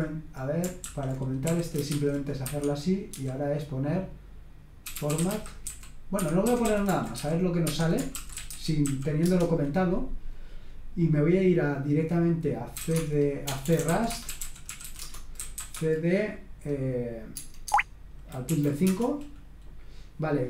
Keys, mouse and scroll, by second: 0.8-9.3 typing, 2.4 Escape, 6.1 Escape, 7.7 Escape, 12.5-16.0 typing, 17.3 Tab, 17.6 Tab, 18.4 Right, 18.8 Return.